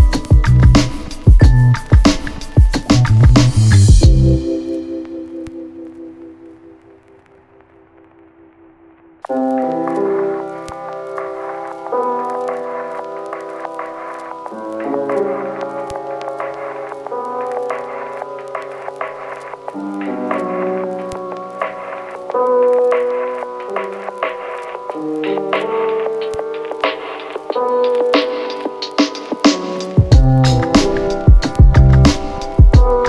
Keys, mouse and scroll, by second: 4.1 ctrl+c, 5.7 ctrl+v, 7.2 right click, 9.2 click, 10.9-17.1 click, 17.3 space, 27.6 space, 30.3-31.8 click.